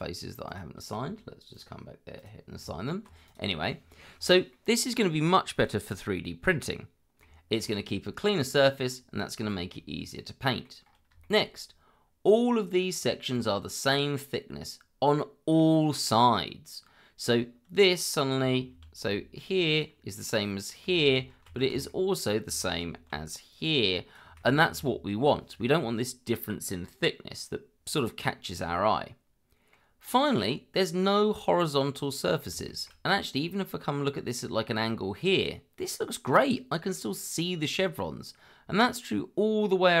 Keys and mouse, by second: 0.4 shift+click, 1.5 click, 2.2 click, 2.6 Tab, 3.2 click, 4.5-7.2 middle drag, 8.2 shift+middle drag, 9.5 shift+middle drag, 10.1-10.6 middle drag, 11.2 shift+middle click, 13.3-17.4 middle drag, 19.0 d, 20.3-21.1 drag, 21.3 ctrl+z, 21.9-22.3 middle drag, 22.6 shift+middle drag, 23.1 d, 23.5 click, 24.6 ctrl+z, 28.9-29.7 middle drag, 30.4-31.2 middle drag, 31.8-32.4 middle drag, 32.6 shift+middle drag, 33.2-34.4 middle drag, 37.6-40.0 middle drag.